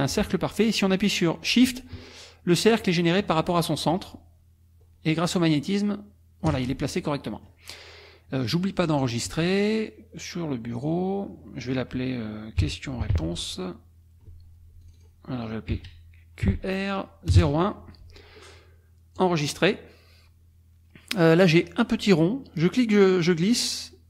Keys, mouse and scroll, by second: 7.0 click, 9.3 click, 10.7 click, 12.6 q, 13.1 r, 14.8 click, 15.7 q, 16.4 r, 17.3 KP_0, 17.4 KP_1, 19.2 click, 22.6-24.0 drag.